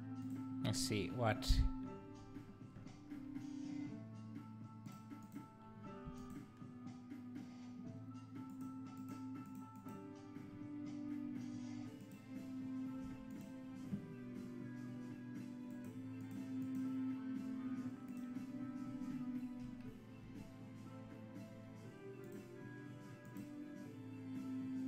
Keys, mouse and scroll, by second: 0.3 click, 4.9 click, 5.2 click, 8.5 click, 9.0 click, 9.5 click, 9.8 click, 12.1 click, 13.5 x, 15.7 click, 16.2 click, 16.6 click, 18.2 click, 22.2 click, 23.2 click.